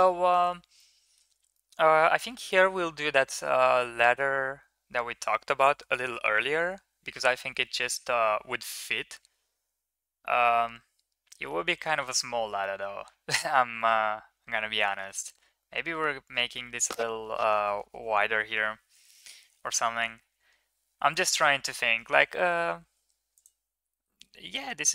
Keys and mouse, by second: 0.6-1.0 middle drag, 1.4 middle click, 8.5-11.3 middle drag, 13.6-14.7 middle drag, 16.4 middle click, 22.1 Tab, 23.1 right click, 23.7 middle click, 24.0 middle click.